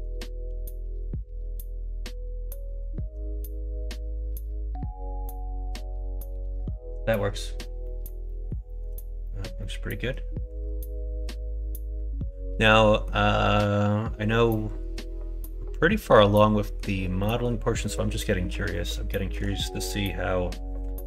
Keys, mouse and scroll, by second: 0.1 middle click, 0.4 g, 3.0 alt+z, 3.4 click, 3.9 Tab, 4.2 click, 5.0-6.5 middle drag, 7.1 middle click, 7.8 middle click, 8.3 middle click, 8.6 shift+middle click, 9.2 middle click, 9.6 middle click, 12.6 middle click, 13.5 middle click, 15.7-16.7 middle drag, 17.2 middle click, 17.9 middle click, 18.7 middle click, 19.1 shift+middle click, 20.9 middle click.